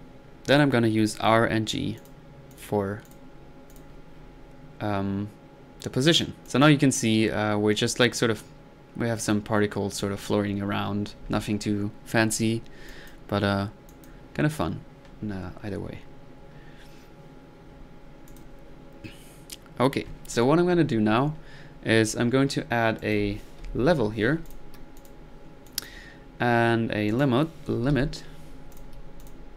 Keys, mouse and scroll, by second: 2.0 click, 2.5 click, 3.0-3.4 drag, 3.7 click, 4.1 click, 4.1 typing, 5.6 middle click, 6.5 click, 16.5-16.9 middle drag, 21.9-22.3 middle drag, 23.0 middle click, 23.6 typing, 24.5 click, 25.0 click, 25.2 click, 25.7 click, 27.1 right click, 27.8 typing, 28.7 click, 29.2 click.